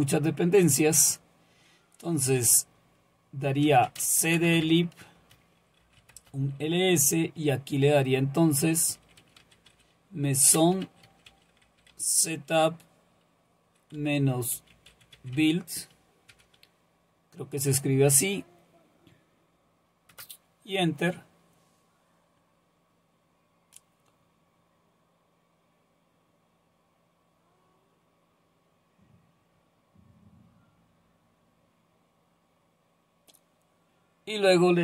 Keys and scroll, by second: 3.4-7.9 typing, 9.0-12.4 typing, 14.0-16.3 typing, 20.1 Return.